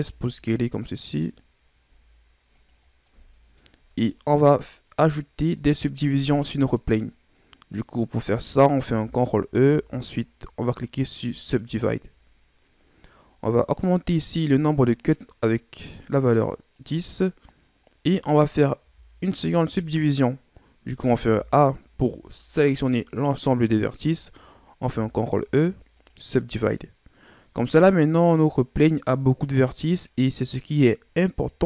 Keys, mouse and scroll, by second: 2.8 scroll down 2, 3.0 middle click, 3.8 scroll up 1, 5.3 scroll down 1, 5.5-8.5 middle drag, 8.8 ctrl+e, 13.7-18.0 drag, 18.1 right click, 18.7 a, 21.1 a, 24.7 ctrl+e, 27.2-29.2 middle drag, 29.2-30.1 scroll up 2.